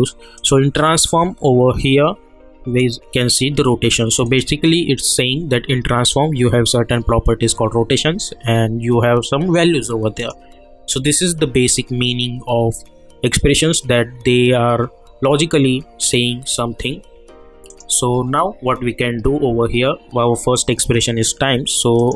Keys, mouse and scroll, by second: 0.3 click, 2.8 click, 10.2 click, 17.7 click, 18.5 -, 22.0 click.